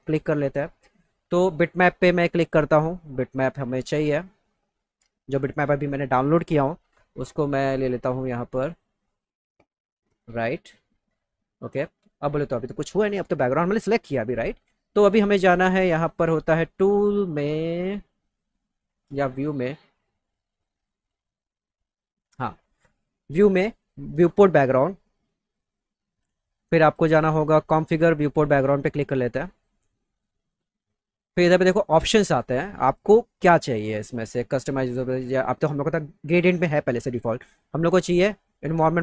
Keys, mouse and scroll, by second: 2.4 click, 3.2 click, 3.4 click, 5.3 click, 7.9 click, 8.4 click, 9.0 click, 10.1 click, 15.8 click, 22.3-23.9 drag, 37.8 click.